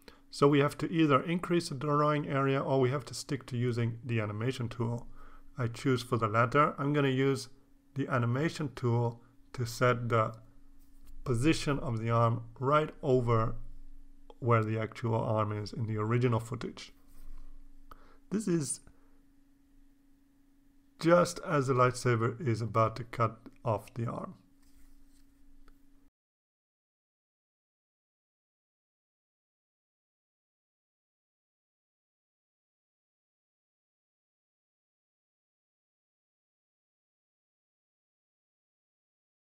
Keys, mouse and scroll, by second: 1.7 click, 3.5-4.4 scroll up 4, 5.0-9.7 drag, 10.6 click, 12.2 scroll up 1, 13.0 scroll down 1, 14.3-18.6 drag, 20.1 click, 21.6-23.0 drag, 23.8-25.0 drag, 26.1-27.5 drag, 27.7 click, 29.4 click, 30.0-31.2 drag, 32.2-33.4 drag, 34.1 click, 35.6-37.8 drag, 38.0-38.5 scroll down 1.